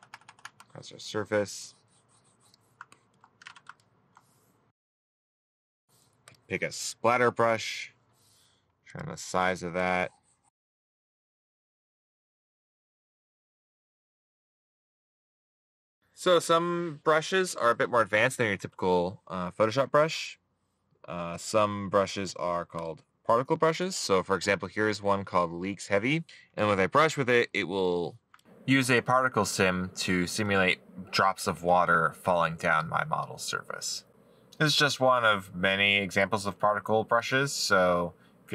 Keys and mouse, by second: 4.1 middle click, 28.9 middle click, 36.1 middle click, 37.7 middle click.